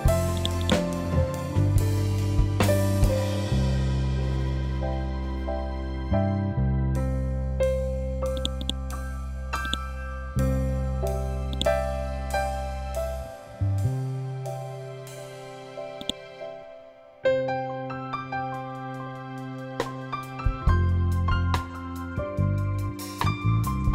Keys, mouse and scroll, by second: 0.5 right click, 2.8 F12, 3.6 Tab, 6.3 6, 6.5 Return, 8.3 click, 8.5 right click, 9.6 click, 12.2 scroll up 1, 15.9-18.1 drag, 18.1 ctrl+z, 19.6 F12, 21.1 Tab, 22.3 8, 22.5 Return.